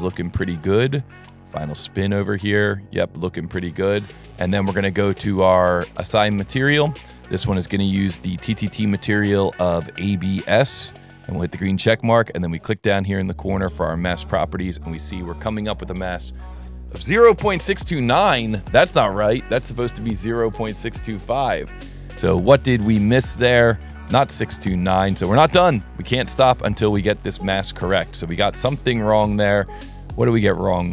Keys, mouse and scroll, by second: 5.0 right click, 6.6 click, 8.0 click, 8.8 click, 9.4 click, 10.5 click, 13.0 click, 14.0 click, 22.9 click, 23.3 click, 24.3 middle click, 25.3-25.6 ctrl+middle drag, 26.8 scroll up 1, 29.5 click.